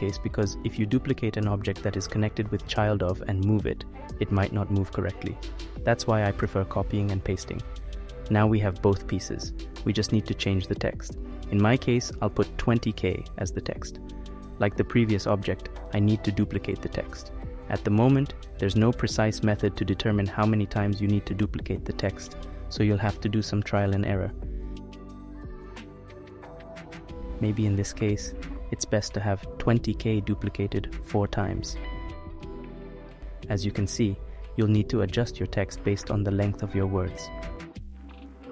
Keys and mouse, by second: 6.2 click, 7.2 click, 8.5 click, 9.2-15.3 drag, 17.6-25.3 drag, 23.9 ctrl+v, 24.4 ctrl+v, 27.4-34.1 drag, 36.0-37.3 drag, 37.7 click.